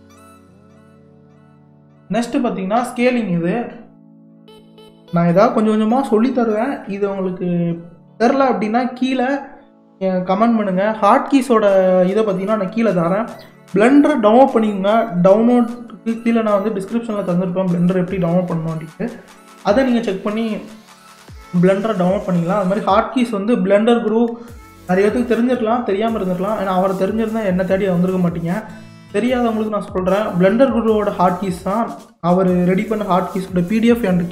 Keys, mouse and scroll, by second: 0.9 click, 3.0-6.2 drag.